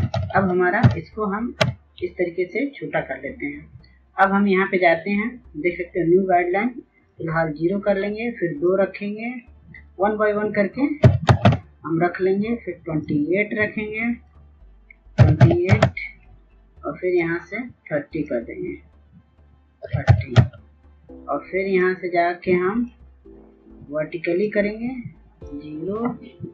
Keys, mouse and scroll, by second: 4.0 click, 9.2 right click, 10.4 KP_2, 12.3 click, 14.6 KP_2, 14.8 KP_8, 16.5 click, 19.3 KP_3, 19.5 KP_0, 21.1 click.